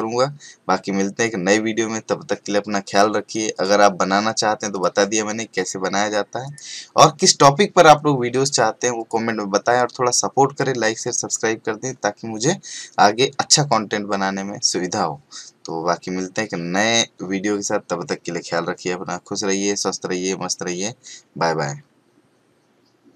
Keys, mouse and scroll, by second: 3.5 click, 9.0 click.